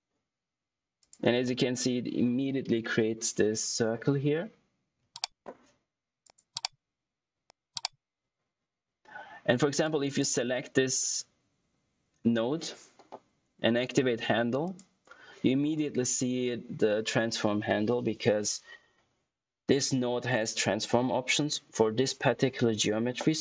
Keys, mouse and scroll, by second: 0.9 click, 1.4 middle click, 2.8 ctrl+z, 6.1 click, 9.7 click, 10.0 typing, 14.6 click, 14.6 typing.